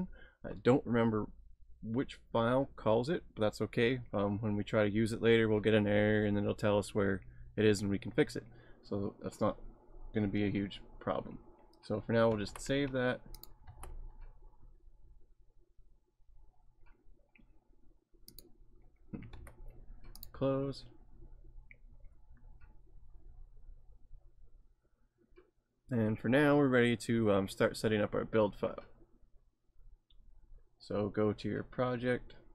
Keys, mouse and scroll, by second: 12.3 ctrl+s, 13.4 click, 13.7 ctrl+s, 18.3 click, 19.3 ctrl+s, 20.2 click, 26.2-26.9 scroll down 3, 26.9 scroll up 1, 27.2-28.0 scroll down 3, 28.0-28.6 scroll up 2, 29.6 scroll down 1.